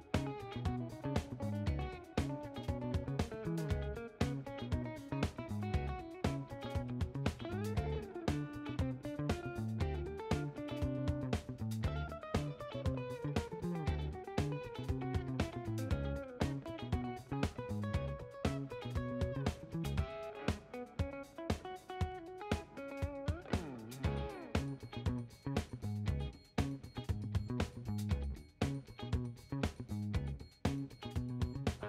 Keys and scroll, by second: 0.8-3.4 typing, 10.3 ctrl+h, 22.6 s.